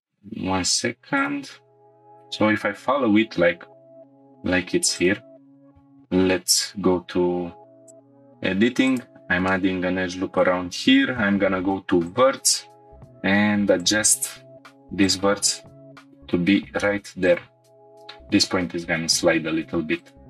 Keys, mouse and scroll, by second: 0.0 click, 1.2 click, 1.9 shift+middle click, 1.9 scroll up 1, 5.0 click, 5.6 Tab, 6.5 ctrl+r, 8.9 click, 9.5 shift+middle click, 11.2 1, 12.0 click, 13.0 g, 13.1 z, 13.8-15.3 drag, 15.3 g, 15.5 z, 15.9 g, 16.1 z, 17.2 click, 17.8 g, 20.0 click.